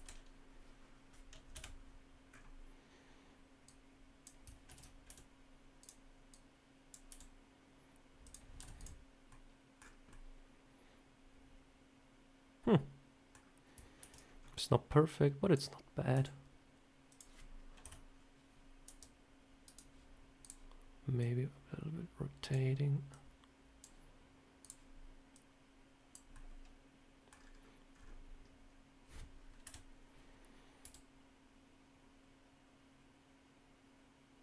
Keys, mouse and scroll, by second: 1.4 KP_1, 2.2 scroll up 4, 3.5 click, 4.6 ctrl+z, 4.9 r, 6.2 click, 6.9 r, 8.5 z, 8.6 click, 9.2 middle click, 9.6-10.0 scroll down 4, 10.0 middle click, 13.9 ctrl+z, 14.1 scroll up 2, 14.9 click, 16.0 r, 17.7 KP_1, 18.7 r, 20.3 click, 21.1 click, 23.0 click, 24.5 click, 25.2 click, 26.2 middle click, 27.2 scroll down 5, 27.8 scroll up 4, 28.5-29.2 scroll up 1, 29.5 KP_7, 30.7 r.